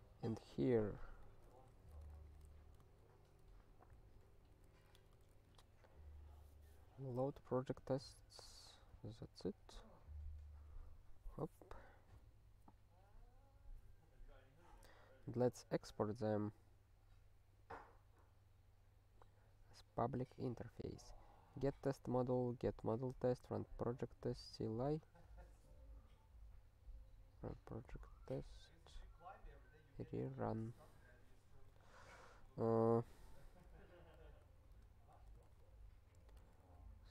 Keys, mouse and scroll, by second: 1.2 click, 1.3 click, 1.8 ctrl+f, 2.1 (, 2.9 alt+shift+s, 3.3 alt+f, 3.6 alt+f, 4.2-5.5 typing, 7.5 ctrl+n, 7.9 ctrl+s, 8.4 ctrl+n, 8.5 ctrl+n, 8.9 ctrl+n, 9.6-10.5 scroll down 3, 10.5-15.4 scroll down 1, 15.4 scroll up 1, 17.2-17.7 scroll up 2, 18.4-19.8 scroll down 2, 27.7 click, 27.8 click, 31.7 ctrl+p, 32.3 ctrl+p, 33.9 ctrl+n, 34.4 Return, 34.7 Tab, 36.4 h.